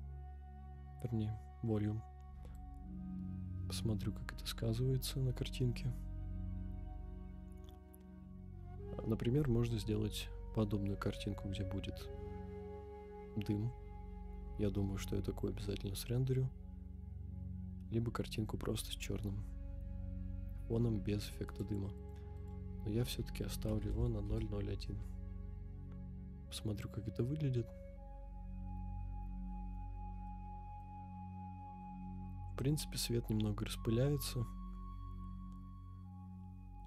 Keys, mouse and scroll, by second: 0.2 scroll up 2, 2.5-21.5 drag, 21.9-24.4 drag, 26.1 scroll up 2, 28.1 scroll down 1, 28.2-28.7 scroll down 1, 30.2-30.8 middle drag, 31.0 scroll down 1, 32.7 KP_0.